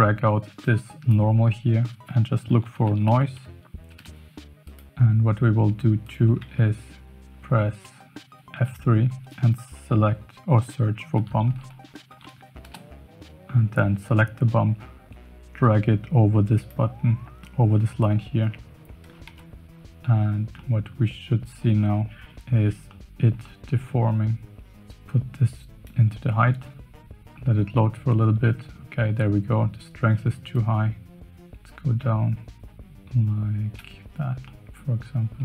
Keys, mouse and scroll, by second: 0.6-4.7 drag, 6.0 click, 6.4 shift+a, 8.5 F3, 19.2 KP_Decimal, 20.7-21.8 middle drag, 22.8-23.2 middle drag, 23.4-23.7 shift+middle drag, 24.7-26.0 drag, 28.5 middle click, 30.5-33.7 shift+drag, 34.4-34.8 middle drag.